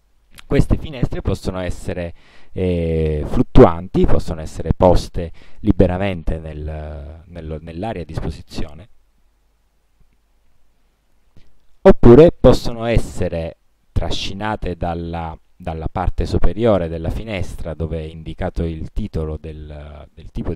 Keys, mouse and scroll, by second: 1.1-2.4 drag, 3.6-5.7 drag.